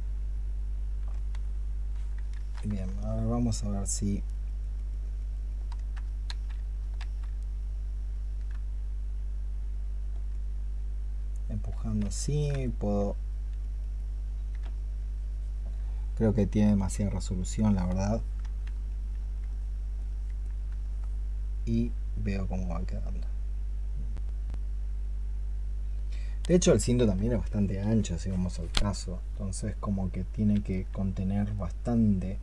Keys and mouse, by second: 2.2 ctrl+z, 2.8 ctrl+click, 3.9 ctrl+click, 6.1 ctrl+z, 6.8 ctrl+z, 7.4 ctrl+click, 12.1 ctrl+click, 13.1 shift+click, 15.4 shift+click, 17.9 ctrl+click.